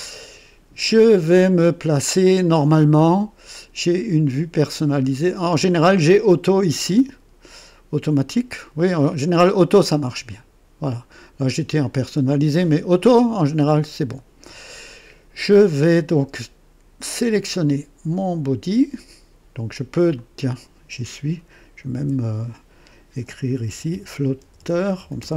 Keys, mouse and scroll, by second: 3.5 click, 5.2 click, 8.1 click, 17.0 scroll down 1, 20.1 click, 21.9 F2, 23.2-25.3 typing.